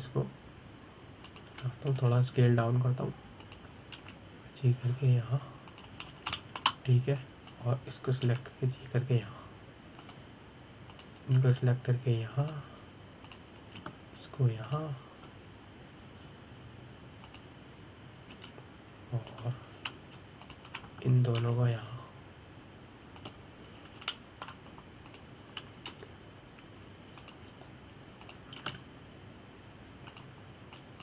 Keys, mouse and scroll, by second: 0.3 g, 5.2 click, 5.7 g, 7.4 click, 7.8 scroll up 2, 8.1-8.9 shift+middle drag, 8.9 click, 9.9 g, 11.8 click, 12.6 click, 13.1 g, 14.2 drag, 14.9 click, 15.5 g, 16.4 click, 18.9 click, 20.0 g, 22.1 shift+click, 23.1 g, 25.8 shift+middle click, 26.7 click, 27.6 g, 28.9 click, 30.0 click, 30.3 g.